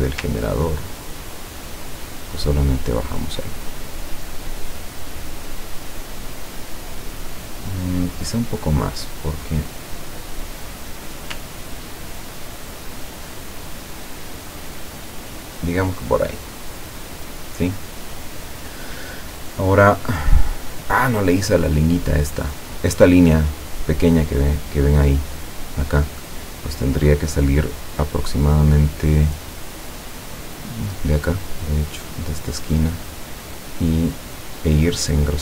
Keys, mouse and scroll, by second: 0.8-3.3 ctrl+drag, 4.7 click, 5.1 click, 6.4-6.8 scroll down 2, 7.4-7.9 scroll up 2, 8.6 click, 9.7-10.7 drag, 12.0-15.8 ctrl+drag, 16.3 ctrl+click, 17.8 click, 22.6 click, 31.9 click, 34.5 click.